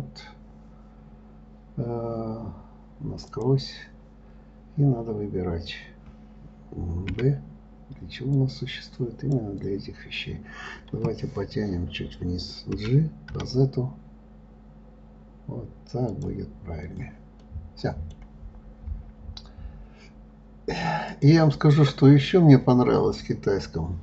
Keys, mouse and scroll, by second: 3.7-4.0 drag, 17.2 click, 17.8-20.8 middle drag, 21.5 click.